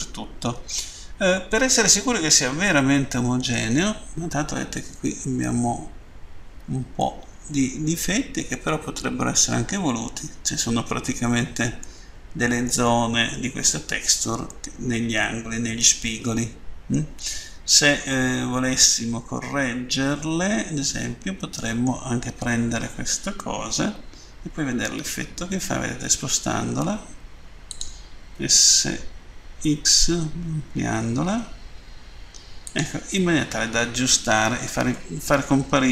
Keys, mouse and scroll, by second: 2.7 middle click, 4.5 scroll up 1, 7.0 middle click, 11.9 middle click, 14.5 middle click, 18.1 middle click, 27.6 click, 28.3 s, 32.6 click, 33.7-34.0 scroll down 2.